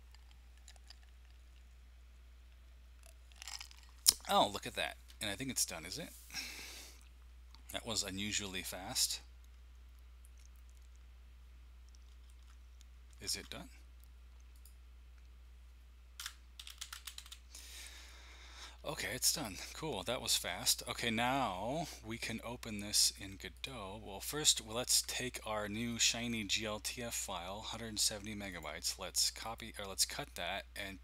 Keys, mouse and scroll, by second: 12.3 alt+Tab, 13.3 alt+Tab, 14.5 click, 15.9-17.7 typing, 19.3 click, 23.5 click, 25.9 click, 29.4 click.